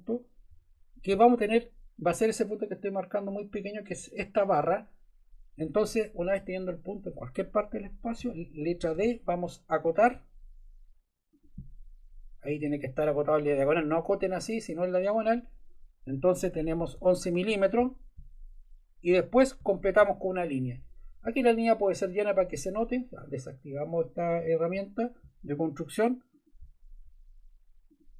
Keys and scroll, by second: 0.5 Escape, 8.8 d, 16.7 1, 17.2 Return.